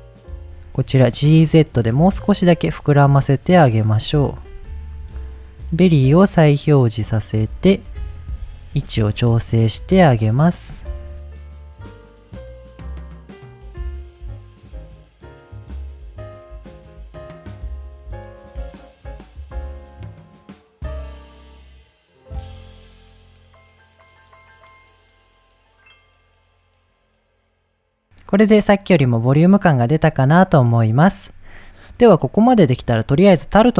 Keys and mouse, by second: 0.1 h, 0.2 click, 0.3 Tab, 0.8 g, 1.0 z, 3.7 click, 4.0 middle click, 4.5 Tab, 6.6 click, 7.4-7.7 middle drag, 8.2 click, 8.6 shift+drag, 9.7 shift+click, 10.2-10.6 middle drag, 11.3-11.7 shift+drag, 11.8 ctrl+click, 11.9-19.4 typing, 12.0 right click, 12.3 middle click, 12.4 shift+click, 12.6 ctrl+click, 12.7 middle click, 13.0 middle click, 13.5 middle drag, 14.0 middle click, 14.4 middle click, 14.7 click, 14.7 middle click, 14.8 click, 14.8 middle click, 15.2 middle click, 15.2 shift+click, 15.5 middle click, 16.0 middle click, 16.0 click, 16.7 click, 17.0 right click, 17.3 click, 17.3 middle click, 17.6 right click, 18.1 click, 18.2 middle click, 18.5 click, 18.7 right click, 18.8 shift+click, 19.4 middle click, 19.6 middle drag, 19.8 click, 20.4 shift+drag, 20.6-28.0 typing, 20.9 middle click, 21.2 right click, 21.2 click, 21.5 click, 21.5 middle click, 21.9 middle click, 22.7 middle click, 23.0 middle click, 23.4 middle click, 24.0 middle click, 24.4 middle click, 24.6 click, 24.9 click, 24.9 middle click, 25.1 click, 25.5 middle click, 25.8 click, 26.2 click, 26.2 middle click, 26.4 right click, 26.4 ctrl+z, 26.6 click, 26.8 middle click, 27.0 middle click, 27.9 middle click, 28.2 middle drag, 28.9-29.3 middle drag, 29.5 middle click, 31.8-32.6 middle drag.